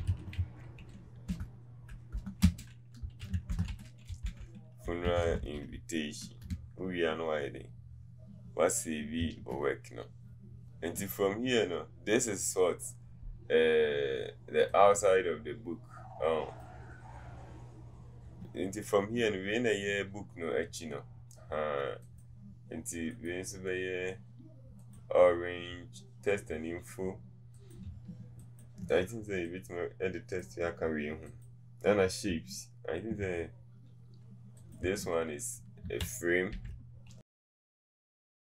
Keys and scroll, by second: 1.3-2.2 typing, 3.5-5.6 typing, 6.5 Return, 9.3 Return.